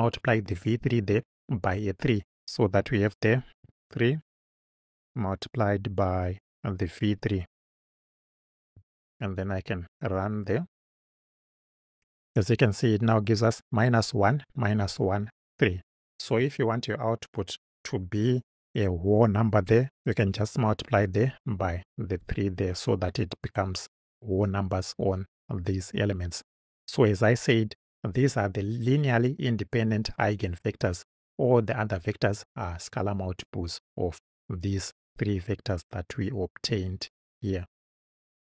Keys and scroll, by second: 1.2 Return, 4.2 3, 6.2 shift+8, 7.9 v, 8.4 3.